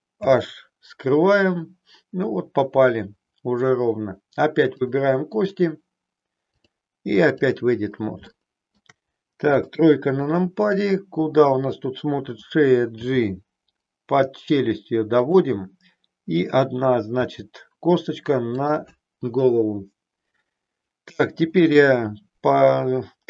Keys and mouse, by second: 0.2 h, 4.7 click, 6.5-7.6 drag, 8.2 shift+middle click, 9.7 KP_3, 13.1 g, 17.2 e, 18.6 click.